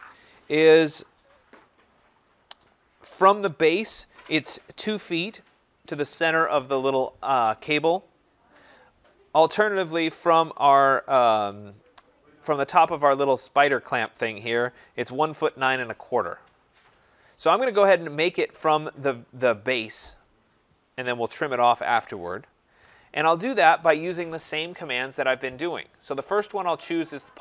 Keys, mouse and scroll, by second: 26.2 click, 27.0 scroll.